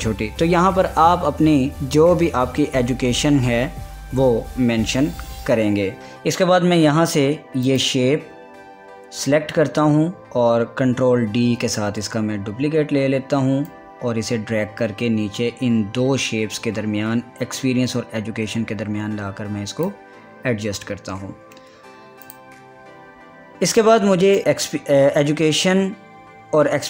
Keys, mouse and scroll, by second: 6.0 ctrl+z, 8.3 click, 11.8 ctrl+d, 14.3-21.3 drag, 21.3 scroll up 1, 21.4 scroll down 1, 22.9 click, 24.8 click, 25.6 scroll down 1, 26.4 scroll up 1.